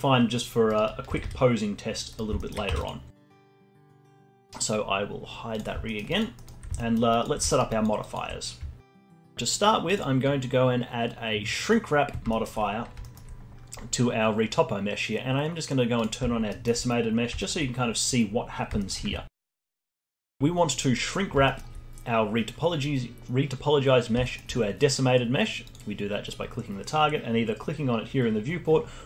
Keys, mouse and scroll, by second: 1.0 r, 2.3 alt+middle click, 2.6 Tab, 3.0 scroll down 1, 3.2 alt+middle click, 3.4 alt+click, 4.0-5.5 alt+middle drag, 5.5-5.8 drag, 5.8 alt+middle click, 6.0 alt+drag, 6.3-7.1 alt+middle drag, 7.1 alt+click, 7.4 alt+right click, 7.6-8.8 alt+drag, 11.7-12.2 drag, 12.2-15.9 alt+middle drag, 15.9 click, 16.4-16.8 alt+middle drag, 16.8-17.3 scroll up 5, 17.3-17.8 alt+drag, 17.8 scroll down 2, 18.7-19.3 alt+middle drag, 19.3-19.6 alt+drag, 19.6-25.6 alt+middle drag, 25.6 click.